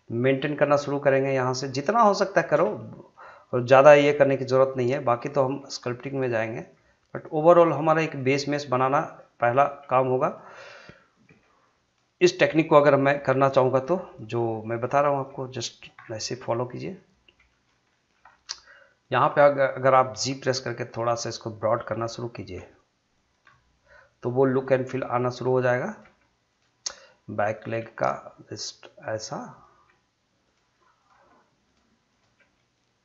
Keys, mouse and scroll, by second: 0.2 click, 0.6 middle click, 2.3 shift+click, 2.8-4.1 middle drag, 4.1 g, 4.8 click, 5.6 g, 6.0 click, 6.7 g, 7.1 click, 7.7 g, 8.1 click, 8.8 g, 9.0 click, 9.6 g, 10.2 click, 11.3 g, 11.8 click, 12.8 g, 13.4 click, 14.2 g, 14.7 click, 15.2 g, 15.7 click, 16.0 scroll down 1, 16.3-17.7 middle drag, 17.7 shift+scroll up 1, 17.9 shift+middle click, 18.2 middle click, 19.0 click, 19.3 middle click, 20.5 g, 21.2 click, 21.6 middle click, 22.4 click, 22.5 g, 23.1 click, 23.4 middle click, 24.7 click, 24.9 g, 25.3 click, 26.0 g, 26.5 click, 26.8 middle click, 27.6 g, 29.0 click, 29.7 g, 30.4 click, 31.1 g, 31.6 click, 32.2 g, 32.5 middle click.